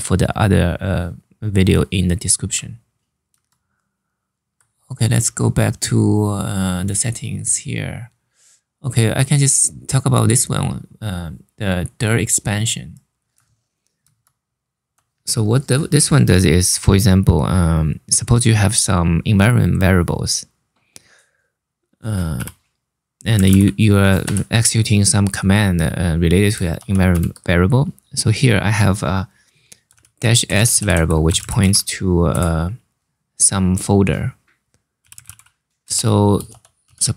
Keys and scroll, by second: 3.0 super+Tab, 13.7 super+Tab, 22.1-23.9 typing, 26.4 shift+4, 26.8 shift+s, 29.6 Home, 30.0 Delete, 30.2 Delete, 30.4 Delete, 30.6 Delete, 30.7-31.8 typing, 32.0 Return, 34.4-36.5 typing.